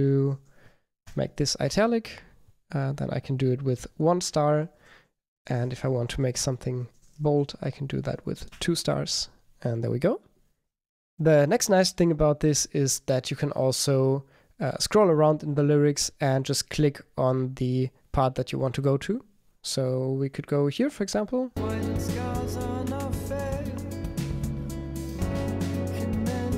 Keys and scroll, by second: 1.7 Return, 4.3 super+r, 4.8 Right, 5.4 Left, 6.9 Right, 8.5 Return.